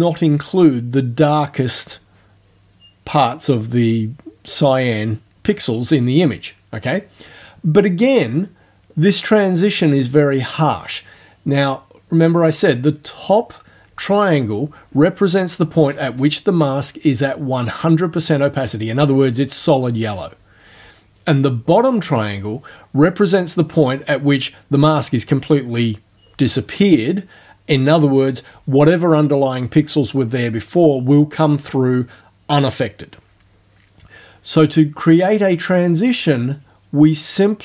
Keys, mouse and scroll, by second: 35.3-37.6 drag.